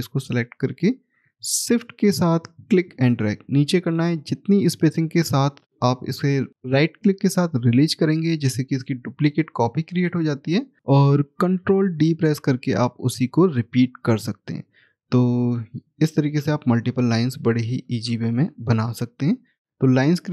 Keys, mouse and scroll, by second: 7.6 shift+right click, 13.9 middle click, 17.0 middle click, 17.8 ctrl+d, 19.6-20.3 scroll down 1.